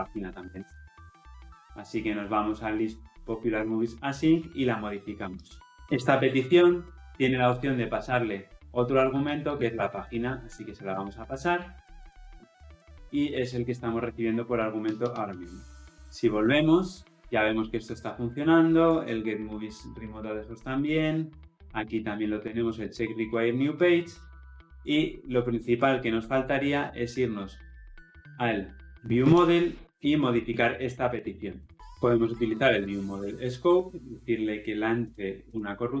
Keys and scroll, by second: 3.4 ctrl+b, 8.1 Return, 13.2 Escape, 16.0 ctrl+alt+o, 16.0 ctrl+alt+Left, 33.7 Return.